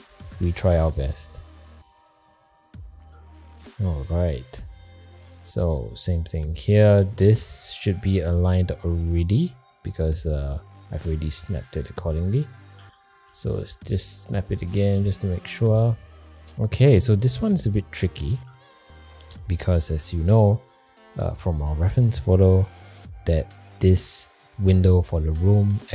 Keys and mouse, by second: 0.7 g, 3.8 middle click, 4.8 middle click, 5.6 shift+middle click, 6.1 middle click, 7.0 middle click, 7.6 click, 8.3 middle click, 11.3-12.4 middle drag, 12.7 g, 15.9 click, 17.2 shift+middle click, 18.2 shift+middle click, 19.0 middle click, 19.8 alt+z, 20.3 middle click.